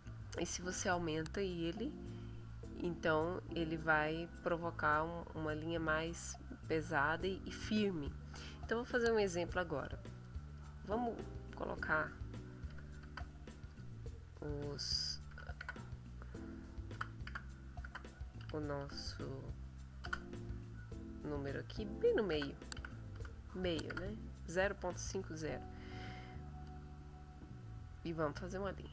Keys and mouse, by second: 10.6 click, 12.7 KP_5, 13.0 KP_0, 13.7 click, 14.5 click, 15.3 KP_5, 15.6 KP_0, 17.0 BackSpace, 17.8 KP_0, 18.4 KP_Decimal, 18.8 KP_5, 20.0 Return, 20.8 click, 22.1-23.7 typing, 23.9 Return, 26.1 middle click, 28.0-28.9 drag.